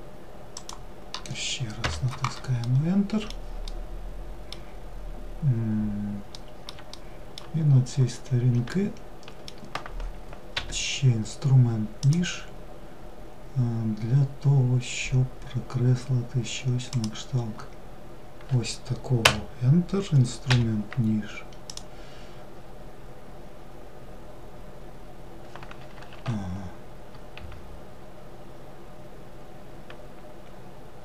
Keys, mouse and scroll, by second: 2.2-7.4 middle drag, 7.4-8.1 scroll down 1, 8.3-10.1 shift+middle drag, 10.1 k.